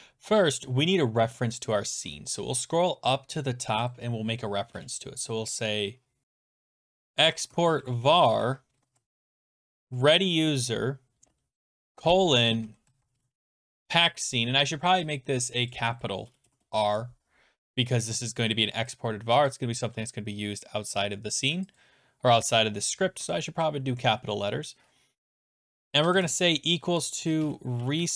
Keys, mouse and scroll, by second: 2.1-3.1 scroll, 3.9 click, 4.7 Return, 6.0-14.0 typing, 6.2 scroll, 6.4 click, 7.5-9.0 drag, 15.7 click, 16.3-17.0 typing, 19.5 click, 20.8 r, 21.8 click, 25.5 =, 26.1 click, 27.0-28.1 typing.